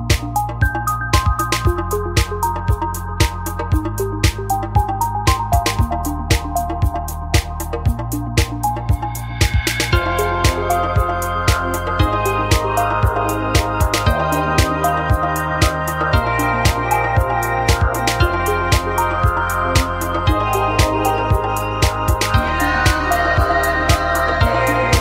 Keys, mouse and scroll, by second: 0.0-0.2 typing, 2.2 right click, 2.6 g, 3.1 middle click, 3.6 middle click, 3.8 a, 5.0-7.0 middle drag, 7.0-8.7 right drag.